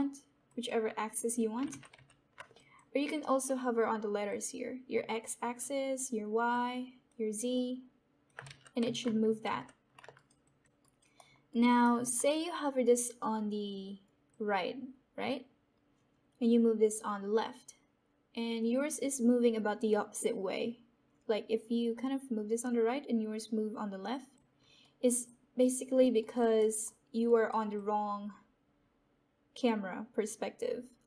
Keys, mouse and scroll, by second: 1.1 click, 1.7 ctrl+z, 2.5 alt+click, 2.5 alt+click, 4.2-8.4 drag, 8.4 ctrl+z, 10.1 right click, 10.7 alt+click, 11.1 alt+right click, 11.9 alt+middle click, 14.2-24.4 drag, 24.7 alt+right click, 25.2 alt+click, 26.2 alt+right click, 26.5 alt+middle click, 27.2 alt+right click, 27.7-31.0 alt+drag.